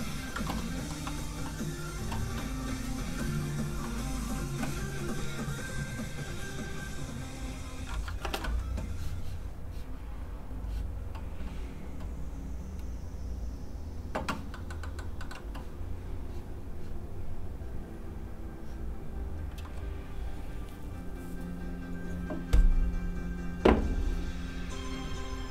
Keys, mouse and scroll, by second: 0.5 middle click, 8.2 ctrl+space, 10.5 click, 14.5 middle click, 14.7 scroll up 1, 14.8 middle click, 15.0 scroll down 1, 15.2 middle click, 18.4 click.